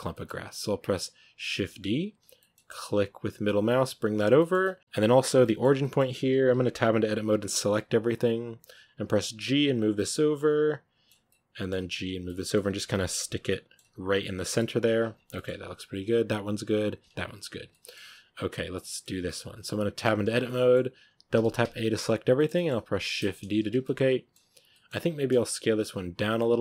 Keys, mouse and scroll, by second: 1.4 shift+d, 4.2-4.8 shift+middle drag, 4.8 scroll up 2, 5.0 right drag, 5.3-6.0 shift+middle drag, 6.0 Tab, 6.4 a, 6.6 a, 6.8 a, 7.2 a, 8.7-9.1 scroll up 2, 9.1 g, 9.9-11.7 middle drag, 11.7 g, 12.1-12.5 middle drag, 12.5 g, 13.4-13.7 middle drag, 13.7 g, 14.3 middle drag, 14.5 g, 14.9 Tab, 15.0 scroll down 4, 15.2-15.7 middle drag, 15.7 right drag, 16.4-17.6 right drag, 17.6 shift+middle drag, 17.8-18.2 scroll up 4, 18.4-19.0 middle drag, 19.0 scroll down 4, 19.1-19.9 middle drag, 19.9 Tab, 20.3-21.2 middle drag, 21.2 a, 21.5 a, 22.2-22.9 shift+middle drag, 22.9 shift+d, 23.7-25.0 middle drag, 25.0 s.